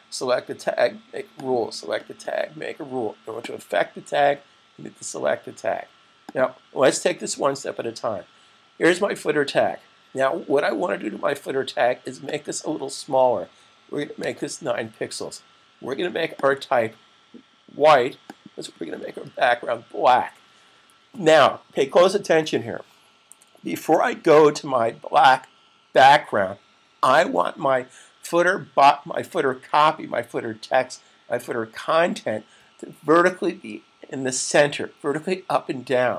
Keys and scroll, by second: 13.6 9.